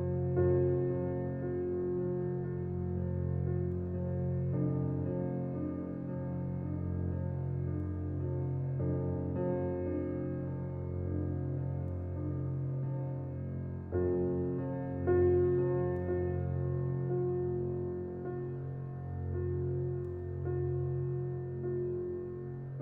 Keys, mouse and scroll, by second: 0.3 e, 5.4-6.4 scroll down 1, 6.4-8.8 middle drag, 8.8 Tab, 9.7-11.3 middle drag, 11.3-13.6 right drag, 13.6 click, 14.1 click, 14.5-16.7 scroll down 1, 16.7-17.8 drag, 18.8-19.4 middle drag, 19.4 alt+z, 20.1-22.7 middle drag, 22.7 Tab.